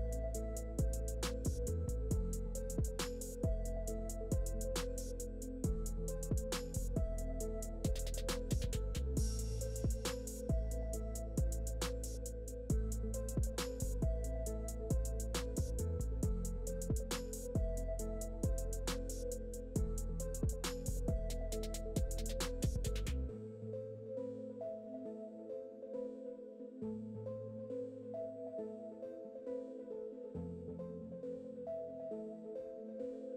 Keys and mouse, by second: 0.6 ctrl+z, 0.8 ctrl+z, 1.4 shift+Tab, 1.6 ctrl+KP_1, 2.5 middle click, 2.7-4.5 ctrl+z, 4.2 ctrl+z, 4.9 Tab, 5.2 Tab, 5.3 click, 5.4-9.0 typing, 6.8 shift+middle click, 7.1 click, 8.0 ctrl+r, 8.2 ctrl+z, 8.5 ctrl+z, 8.6 click, 8.7 ctrl+r, 9.4 ctrl+z, 9.6 ctrl+r, 9.9 ctrl+r, 11.0 ctrl+r, 11.6 ctrl+r, 11.9-12.9 typing, 12.3 ctrl+r, 13.2 Tab, 13.4 ctrl+r, 13.6 shift+middle click, 13.8 ctrl+z, 13.8 ctrl+r, 14.3 click, 14.3 g, 14.4 s, 15.1 click, 15.5 s, 15.9 g, 16.2 ctrl+r, 16.5 s, 16.7 g, 16.9 Tab, 17.0 click, 17.2 ctrl+KP_1, 17.4 ctrl+KP_3, 17.4 shift+click, 17.9 shift+click, 18.1-19.9 typing, 19.2 click, 19.5 click, 20.2 Tab, 21.4 ctrl+KP_1, 21.6 ctrl+KP_3, 22.2 s, 22.6 Tab, 24.7 middle click, 25.0 ctrl+z, 25.7 Tab, 25.7 middle click, 27.8 shift+KP_7, 28.1 Tab, 28.2 shift+a, 33.1 click.